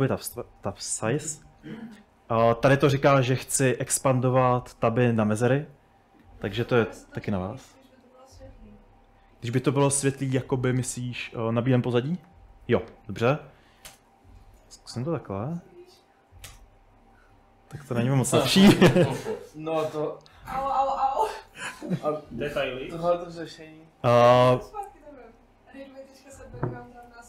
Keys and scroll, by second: 1.2 Escape, 1.6 j, 2.4 shift+v, 8.9 Escape, 9.2 Escape, 12.9-16.5 typing, 23.9 Up, 24.1 Up, 24.5 Return, 26.9-27.2 typing.